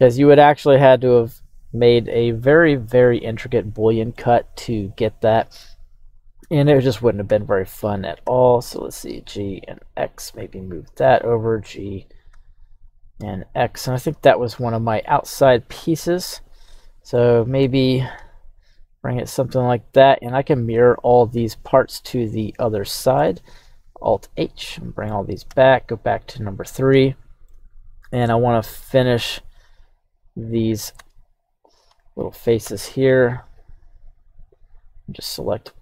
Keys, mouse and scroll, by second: 4.1-5.6 middle drag, 6.0 right click, 6.8 middle click, 7.3 KP_1, 8.3 g, 9.3 x, 10.6 click, 11.1 right click, 12.3 g, 13.2 x, 14.1 drag, 14.4-15.1 middle drag, 14.4 scroll down 1, 15.3-15.7 scroll up 2, 15.7-17.2 middle drag, 17.6 g, 18.1 x, 19.9 click, 21.1-21.7 scroll down 2, 22.3 click, 22.9 middle click, 24.1 alt+h, 24.7-25.2 middle drag, 25.5 KP_1, 26.3-26.9 scroll up 2, 27.0-27.5 shift+middle drag, 28.3 right click, 28.8 Tab, 29.3 right click, 29.9 right click, 31.0 Tab, 32.6 q, 34.6 right click.